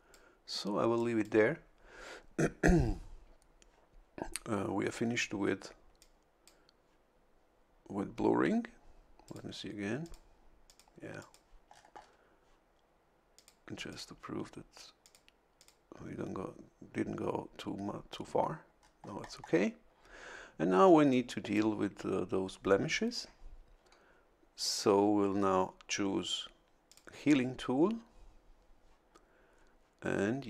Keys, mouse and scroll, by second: 0.9 click, 6.0 click, 9.2 click, 10.0 click, 10.6 click, 11.2 click, 11.6-12.2 scroll down 1, 13.3 click, 13.9 click, 15.0 click, 15.6 click, 18.8-19.6 scroll up 1, 21.1 click, 26.9 click.